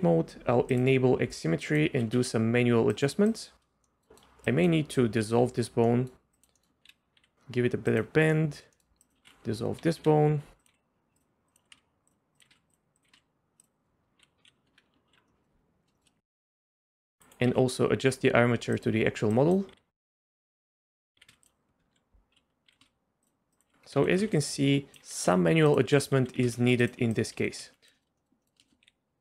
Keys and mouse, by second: 0.7-1.9 drag, 1.9 g, 3.4 click, 3.8 middle click, 4.6 click, 5.2 ctrl+x, 5.9 click, 6.4 click, 6.9 KP_3, 7.2 g, 8.3 click, 8.7 click, 9.2 ctrl+x, 10.0 KP_4, 10.6 click, 10.7 g, 11.5 click, 11.6 g, 12.3 click, 12.5 g, 13.0 click, 13.6 g, 14.7 Tab, 15.1 alt+h, 15.3 click, 15.4 KP_1, 16.6 click, 17.5 Tab, 17.9 click, 18.2-20.0 typing, 19.6 click, 21.1 g, 22.3 l, 22.7 g, 23.5 click, 23.9 g, 25.0 g, 26.2 g, 27.1 click, 27.4 g, 27.9 middle click, 28.2 middle click, 28.4 middle click, 28.8-29.2 typing.